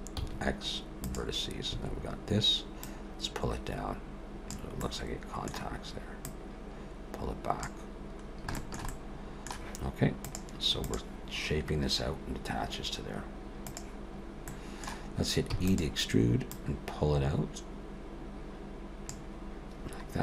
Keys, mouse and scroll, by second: 0.2 x, 1.7 a, 2.8 click, 4.8 middle click, 6.3 click, 8.2-8.6 scroll down 2, 8.6 shift+middle click, 8.9 middle click, 14.2-15.5 scroll up 2, 14.5 middle click, 15.5 e, 16.5 click.